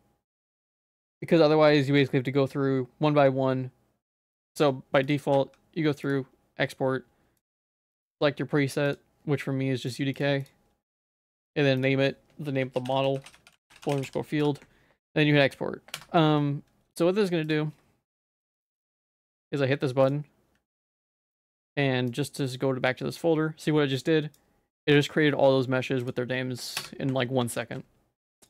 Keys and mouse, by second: 5.0 click, 5.3 q, 17.5 click, 20.0 click, 20.9 ctrl+s, 21.5 q, 27.5 ctrl+s.